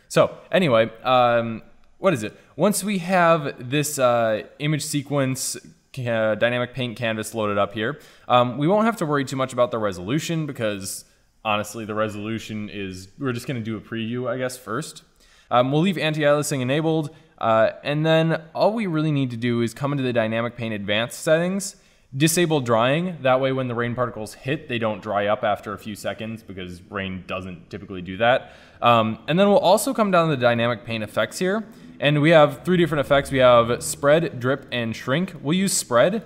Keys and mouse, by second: 4.7-18.9 middle drag, 18.9-20.5 drag.